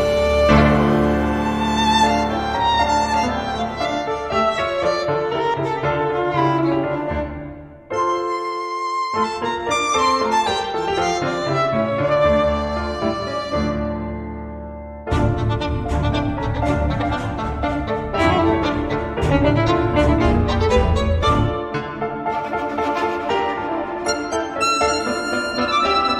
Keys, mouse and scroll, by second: 0.4-1.7 drag, 2.6 click, 3.7 click, 5.7 click, 7.5-11.3 drag, 11.2 0, 11.9-12.2 scroll down 2, 12.5-12.8 scroll up 2, 13.1 scroll down 2, 15.0 click, 16.3 click, 17.5 click, 18.6-21.2 typing, 23.6 click, 24.5 6, 25.2 4, 25.9 click.